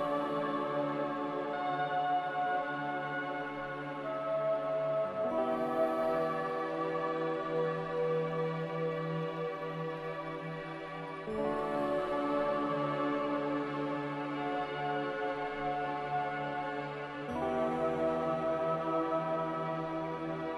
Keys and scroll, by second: 10.6 g, 12.9 Escape, 16.9-17.2 typing, 19.9 5.